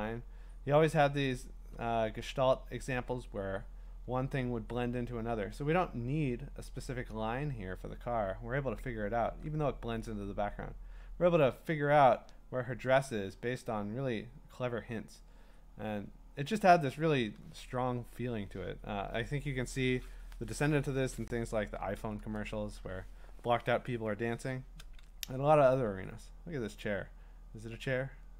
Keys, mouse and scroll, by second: 0.0 middle click, 0.1 middle click, 0.4 middle click, 0.5 middle click, 1.0 middle click, 1.2 middle click, 1.5 middle click, 4.5 scroll, 9.1-10.2 scroll, 10.2-12.1 scroll, 13.8 scroll, 13.9-14.8 scroll down 2, 14.8-15.7 scroll down 5, 15.7-16.8 scroll down 12, 16.8-18.0 scroll up 6, 18.0-18.6 scroll, 18.6-19.5 scroll, 22.1-24.8 scroll, 24.8 scroll down 2.